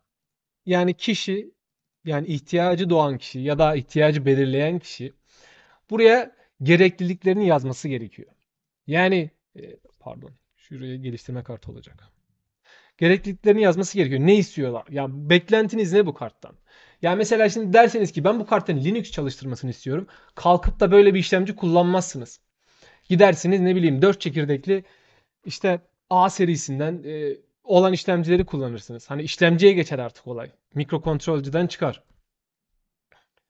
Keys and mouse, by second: 0.0 click, 1.5 shift+click, 1.6 shift+click, 2.5 shift+BackSpace, 3.1 click, 5.3 shift+click, 8.3 shift+click, 9.4 shift+click, 10.1 shift+click, 10.8 shift+click, 11.2 shift+space, 33.4 shift+click.